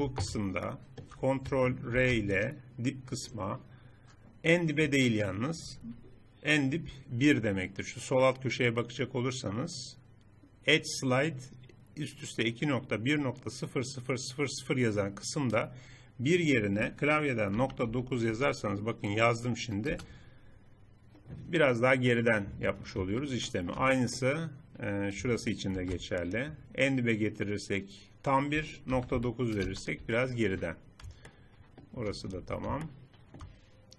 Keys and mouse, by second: 2.0 ctrl+r, 21.5 click, 22.5-23.6 middle drag, 23.9 middle click, 24.3 middle click, 24.5-25.8 middle drag, 25.8 ctrl+r, 30.4 middle click, 31.3 middle click, 32.4 Tab.